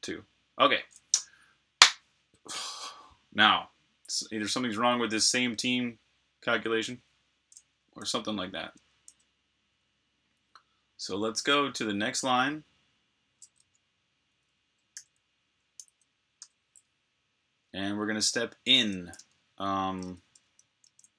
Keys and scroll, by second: 8.7 ⟲, 12.0 n, 13.4 ⟳, 14.9-16.3 typing, 19.0 super+Tab.